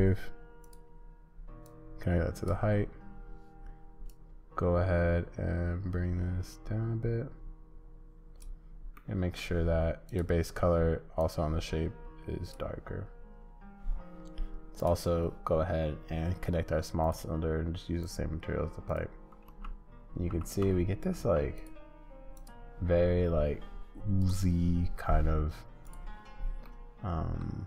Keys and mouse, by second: 1.7 click, 4.1-8.9 drag, 8.9 middle click, 10.1 click, 18.9 click, 19.5 space, 20.1 space, 20.5 space, 21.2 space, 24.2 click, 26.7 middle click.